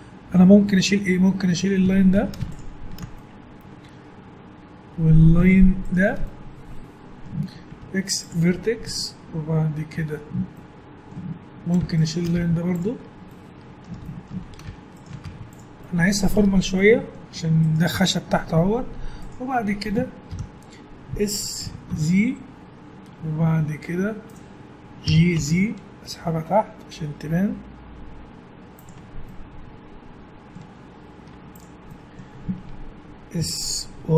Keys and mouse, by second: 1.2 middle click, 2.2 a, 2.5-3.8 right drag, 3.1-4.9 middle drag, 3.8 click, 5.8-7.7 middle drag, 7.7 x, 8.8-12.0 middle drag, 12.0 right click, 12.3 x, 12.8 middle click, 13.5 right click, 13.7 middle click, 14.1 middle click, 15.2 x, 20.3 ctrl+l, 21.6 s, 25.1 g, 29.0 Tab, 29.2-30.4 middle drag, 31.2 Tab, 33.4 s.